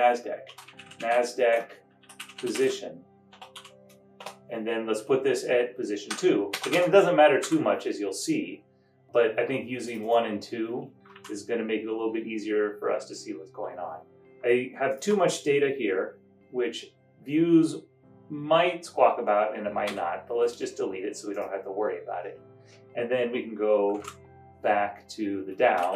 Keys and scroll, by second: 0.3-4.1 typing, 4.2 Return, 5.8-7.5 typing, 9.7 typing, 11.3 super+Down, 20.0 Delete, 24.1 super+Up, 25.8 Down.